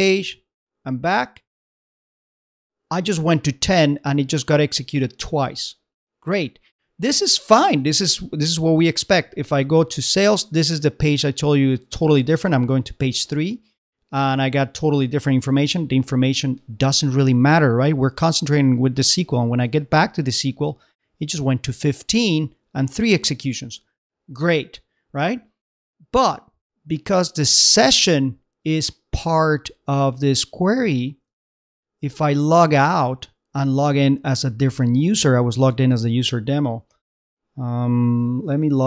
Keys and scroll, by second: 1.7 super+Tab, 7.8 super+Tab, 19.7 super+Tab, 31.5 super+Tab.